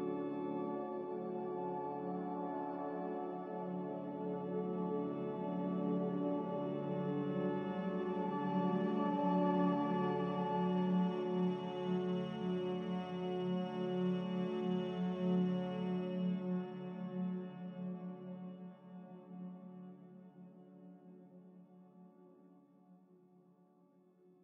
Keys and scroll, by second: 6.0 z, 11.4-12.3 typing, 18.4-19.2 typing.